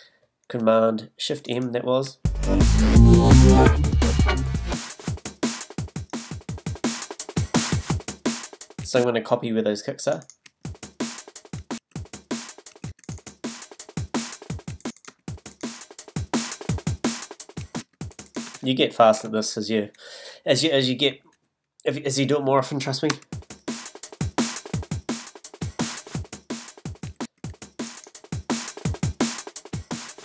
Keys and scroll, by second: 2.0 space, 8.8 space, 10.4 space, 14.7 space, 17.6 space, 23.1 space, 27.0 □.